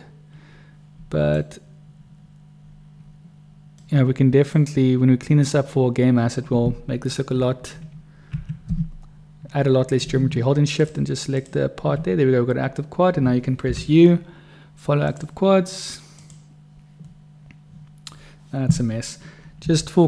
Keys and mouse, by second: 0.1-1.5 middle drag, 3.9 middle click, 8.3 3, 10.7 shift+click, 13.6 u, 19.6 u.